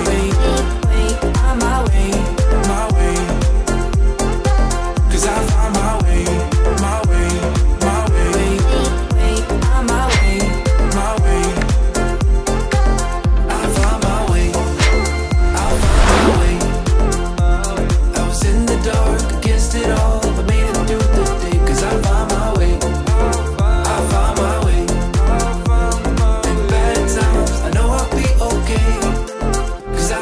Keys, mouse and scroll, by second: 0.2 click, 3.8 click, 5.4-6.3 scroll down 1, 18.6-21.9 drag, 21.9 space, 25.3 click.